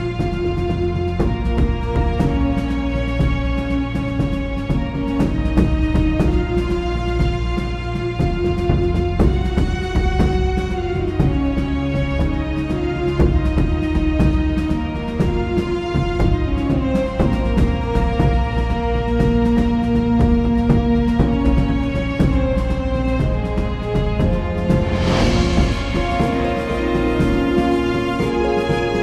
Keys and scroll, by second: 5.2-6.0 typing, 11.5 Return, 22.9 super+z, 24.2 super+z, 25.6 super+z.